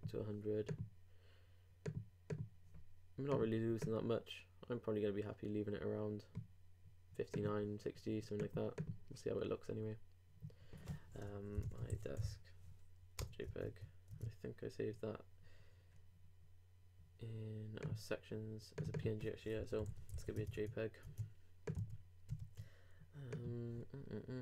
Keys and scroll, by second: 13.4 super+Return, 20.1 super+g, 20.3 super+s, 20.3 super+Tab, 21.8 super+r.